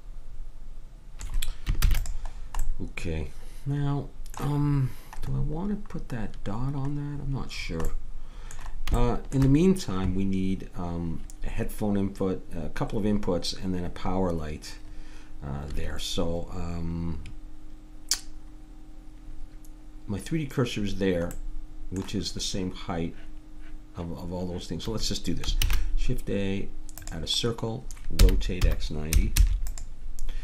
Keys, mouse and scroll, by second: 1.8 ctrl+s, 7.9-15.9 middle drag, 25.6 shift+a, 28.2 r.